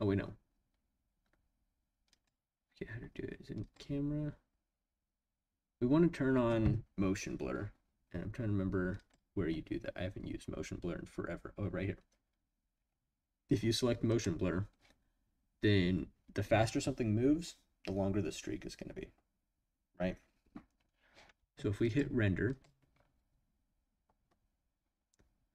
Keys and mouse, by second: 2.1 click, 3.6 click, 8.9 click, 14.1 click, 21.8-22.8 drag.